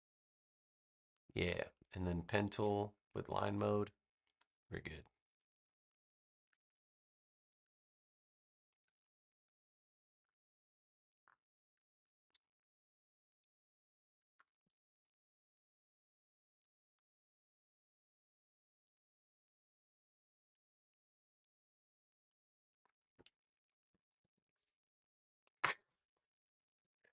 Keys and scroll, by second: 14.5 v, 23.8 super+-, 26.5 super+=.